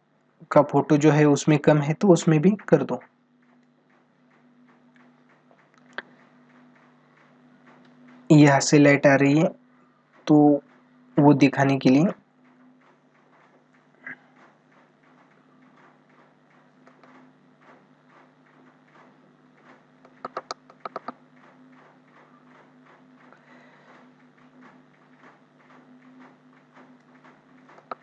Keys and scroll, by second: 16.6 ctrl+alt+z, 19.7 ctrl+alt+z, 23.4 ctrl+-, 24.7 ctrl+-, 25.3 ], 27.5 ctrl+alt+z.